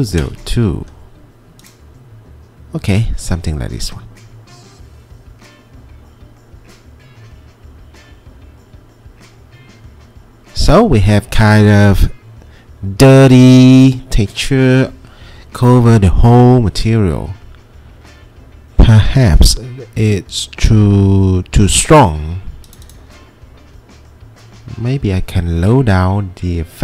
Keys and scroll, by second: 0.1 Return.